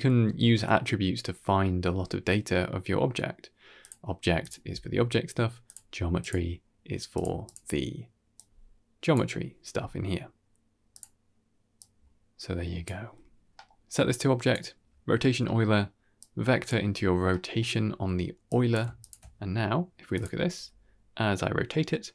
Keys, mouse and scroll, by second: 0.1 click, 0.1 x, 3.7 click, 4.3 click, 5.5-6.2 drag, 7.0 click, 7.3 click, 8.2 click, 10.8 click, 11.7-12.7 drag, 13.4 middle click, 13.8-14.4 drag, 15.3 middle click, 16.1-16.5 drag, 17.2 middle click, 18.4 click, 20.0 click, 20.5 r.